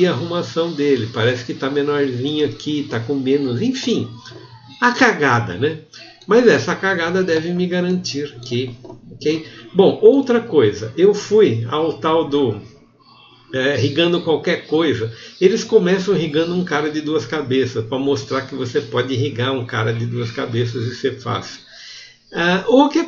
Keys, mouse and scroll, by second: 10.3 g, 18.5 r, 18.6 g, 19.5 g, 19.8 r, 20.0-20.8 drag, 20.8 g, 20.8 r.